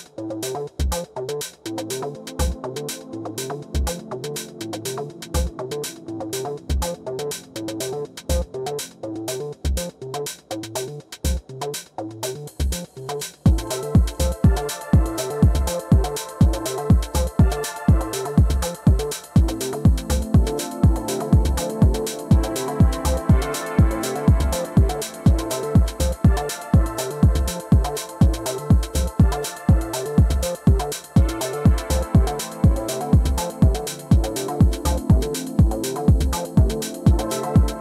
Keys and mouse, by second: 0.3-2.0 drag, 0.3 w, 2.1 alt+click, 3.1 e, 3.9 click, 4.9 ctrl+z, 5.5 middle click, 6.2-9.0 drag, 13.0 click, 14.6 click, 14.9-17.5 right drag, 22.2 click, 23.5 drag, 24.0 click, 27.5-28.7 right drag, 29.7 click, 32.9 click, 35.8 click, 36.8 click.